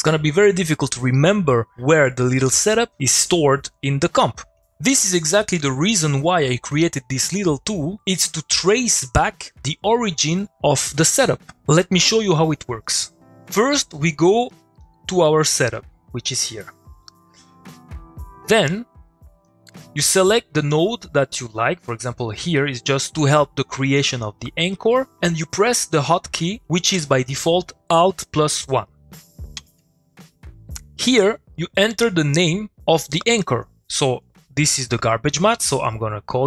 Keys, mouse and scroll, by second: 14.5 click, 14.7 middle click, 14.8 click, 15.1 middle click, 16.4 click, 16.7 middle click, 17.6 click, 20.6 middle click, 20.7 click, 21.3 middle click, 29.4 click, 35.4 alt+shift+1, 35.5-36.4 typing.